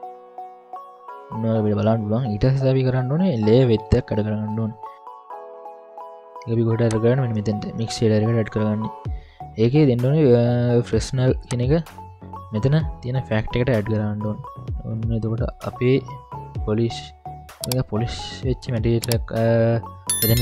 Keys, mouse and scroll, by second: 1.3 scroll up 1, 1.4 middle click, 3.4 ctrl+alt+a, 7.6 middle click, 11.5-13.4 drag, 14.6-15.0 scroll up 3, 15.0-16.6 middle drag, 16.9-17.4 scroll up 3, 17.4-18.0 scroll down 4, 17.9 scroll up 1, 18.0-19.0 middle drag, 19.5-20.4 middle drag.